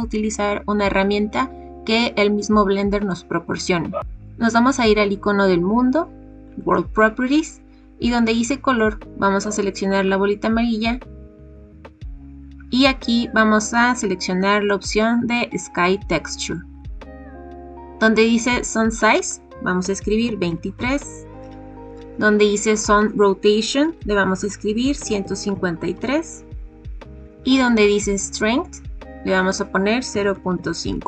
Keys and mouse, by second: 6.5 click, 9.9-16.8 drag, 19.2-21.2 drag, 22.7-26.6 drag, 29.4-31.0 drag.